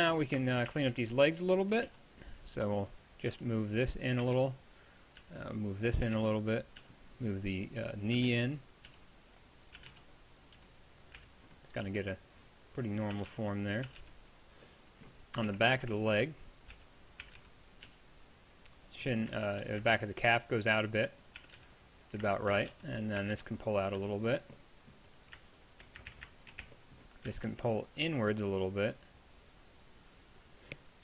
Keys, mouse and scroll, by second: 0.7 a, 0.9 z, 1.7 a, 1.9 b, 3.3-6.8 typing, 8.2-11.2 typing, 13.2 a, 13.4 b, 13.9 a, 14.0 b, 15.5-17.9 typing, 20.0 ctrl+z, 20.3 g, 21.4 a, 21.6 b, 22.6-24.0 typing, 26.1 ctrl+z, 26.6 z, 27.3 s.